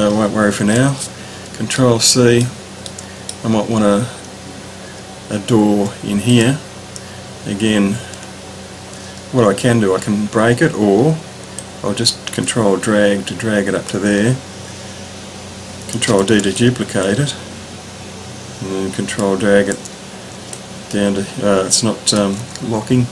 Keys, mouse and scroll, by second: 0.5 ctrl+c, 1.7 middle click, 1.8 click, 1.9 middle click, 2.9 middle click, 5.1-6.3 ctrl+scroll up 3, 6.3 click, 8.3 ctrl+scroll down 1, 8.9-9.8 scroll down 2, 11.6-14.0 drag, 16.1 ctrl+d, 16.7 click, 17.8 ctrl+click, 20.8-22.2 ctrl+drag.